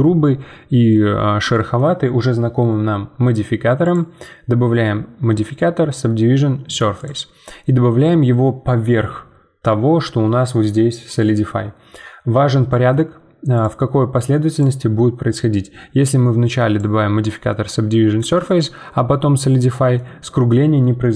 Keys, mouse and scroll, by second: 0.0-1.2 middle drag, 1.2-1.5 scroll down 3, 1.5-3.8 shift+middle drag, 3.8-17.5 drag, 17.5-18.8 middle drag, 18.8 scroll up 2, 19.1-21.1 middle drag.